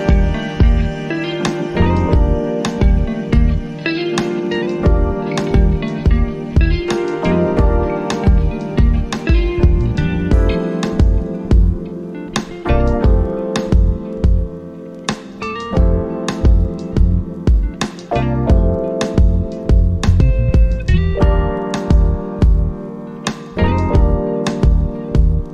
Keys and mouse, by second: 3.1 click, 6.0 click, 10.4 click, 11.3 click, 13.3-22.5 drag, 22.8 click.